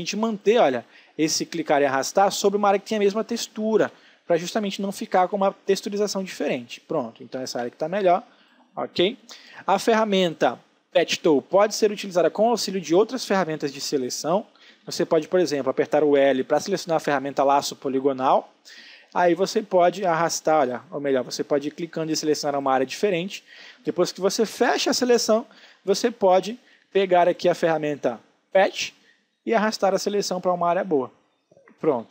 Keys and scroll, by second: 2.9 ctrl+z, 3.8 ctrl+alt+z, 4.5 space, 7.3 ctrl+d, 7.6 alt+space, 14.3 ctrl+d, 16.1 l, 17.5 ctrl+space, 22.8 space, 31.4 ctrl+d.